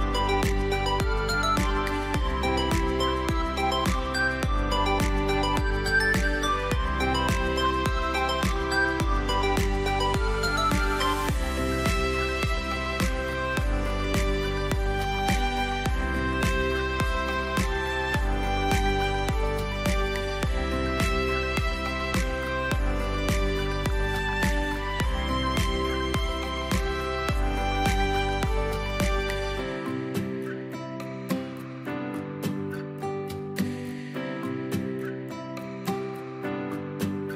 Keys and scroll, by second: 0.5 space, 2.2 space, 4.2-7.1 typing, 8.2-9.1 typing, 13.4 ctrl+v, 14.2 Escape, 21.1 space, 32.9 space, 34.0 space, 36.5 a, 36.7 v.